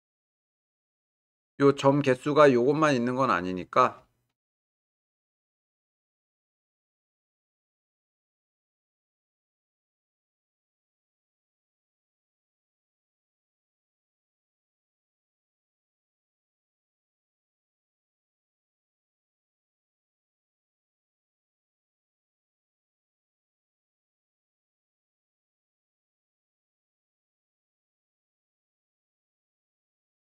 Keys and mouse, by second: 0.7 g, 0.9 y, 6.8 click, 8.2 g, 8.4 y, 11.8 shift+click, 13.7 click, 14.7 g, 14.9 y, 19.8 g, 20.0 y, 23.6 click, 24.9 g, 25.1 y, 29.8 g, 30.0 y.